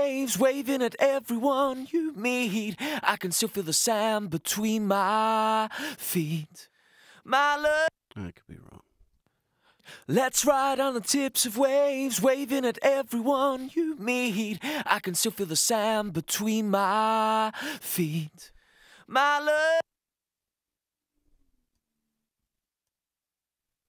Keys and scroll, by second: 7.6 space, 9.0 space, 19.5 space.